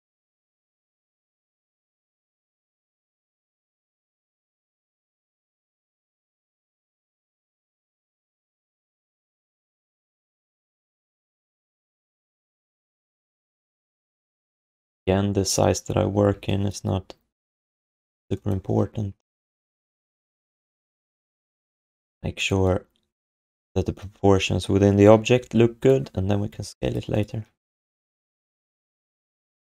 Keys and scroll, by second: 3.9 ctrl+s, 11.0 ctrl+h, 11.7 alt+shift+d, 11.9 ctrl+s, 14.1 r, 16.0 f.